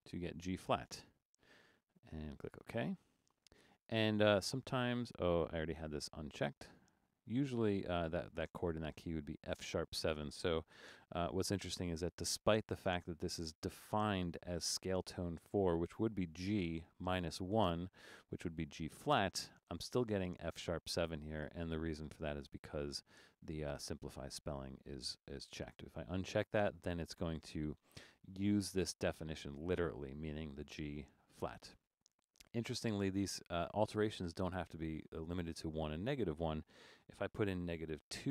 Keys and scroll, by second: 0.0-0.5 typing, 10.8 Return, 27.5 Return, 37.5-38.3 typing.